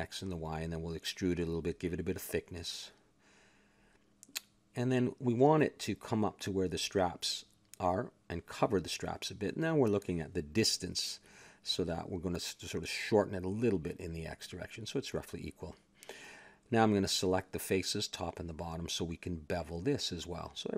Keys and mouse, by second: 0.3-1.3 middle drag, 1.3 e, 2.4 a, 2.5 a, 3.0 ctrl+n, 3.4 a, 3.6 Tab, 4.6 z, 5.4 middle click, 6.4 KP_1, 7.6 click, 8.2 middle click, 8.9 a, 11.7 click, 12.0 Tab, 12.5 a, 13.3 s, 15.1 a, 15.3 middle click, 15.6 ctrl+Tab, 15.6-17.1 drag, 17.1 a, 17.3 ctrl+Tab, 18.1 click, 19.5 click, 20.4 middle click.